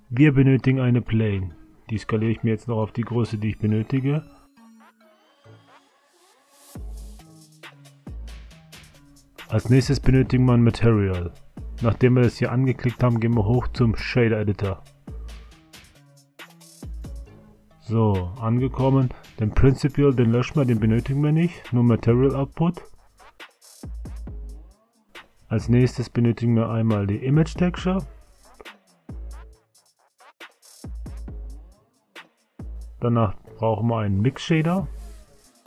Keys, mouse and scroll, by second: 2.2 s, 4.6-6.4 drag, 9.2 click, 10.8 click.